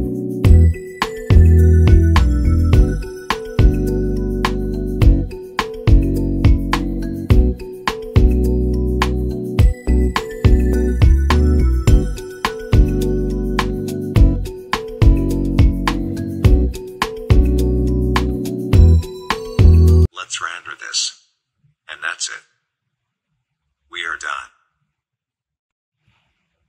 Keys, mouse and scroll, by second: 0.0-1.7 typing, 2.7 click, 5.6 click, 5.7 click, 6.7 9, 7.4 7, 8.4 Return, 8.6 click, 8.6 click, 10.0-12.1 drag, 12.0-12.9 typing, 13.8 Return, 13.9 click, 14.1 click, 15.5 click, 16.0-18.1 typing, 17.7 click, 20.1 click, 20.1 click, 23.1 click, 26.0 click.